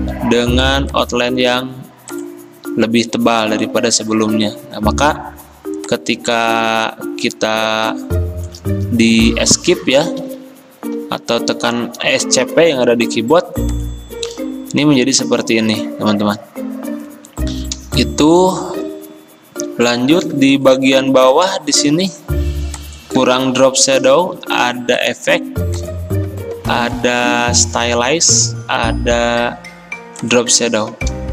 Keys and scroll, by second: 10.3 Up, 10.5 Up, 10.7 Up, 12.5 Escape, 21.9 ctrl+z, 23.2 ctrl+z.